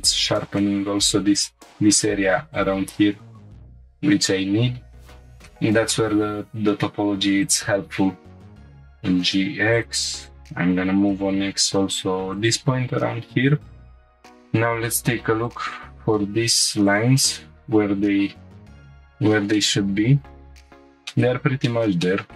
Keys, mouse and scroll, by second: 0.6 middle click, 5.2 scroll down 2, 5.5 shift+middle click, 5.9-6.3 middle drag, 7.4 click, 8.0 scroll up 2, 8.6 click, 8.6 g, 8.6 y, 9.2 x, 9.7 click, 11.0 g, 11.3 x, 12.4-12.9 drag, 12.9 scroll down 1, 14.0 scroll up 1, 16.9 ctrl+click, 18.7 click, 19.1 scroll up 3, 19.5 shift+middle click, 20.4 scroll up 1, 20.8 scroll down 1, 21.1 middle click, 21.9 shift+middle click, 22.0 middle click.